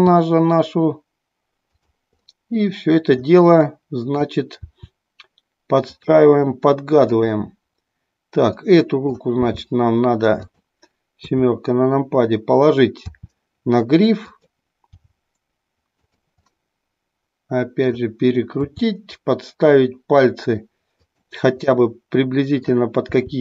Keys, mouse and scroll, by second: 0.0 r, 1.9 drag, 2.3-3.3 middle drag, 3.9 middle click, 4.8 r, 7.0 click, 8.6-9.3 middle drag, 9.4 g, 13.2 r, 14.4 click, 15.1 g, 16.1 drag, 16.5-18.0 middle drag, 18.8 r, 21.7-22.8 middle drag, 23.2 r.